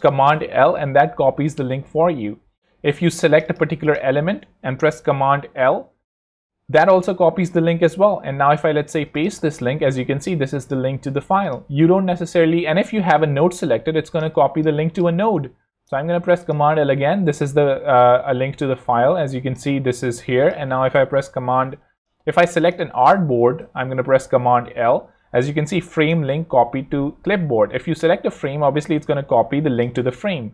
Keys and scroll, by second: 5.5 super+l, 9.0 t, 9.5 super+v, 10.0 super+Return, 10.5 z, 14.2 space, 15.6 super+l, 16.2 super+t, 16.8 super+v, 17.2 super+Return, 21.7 super+z, 22.9 z, 23.4 super+z, 24.0 super+l.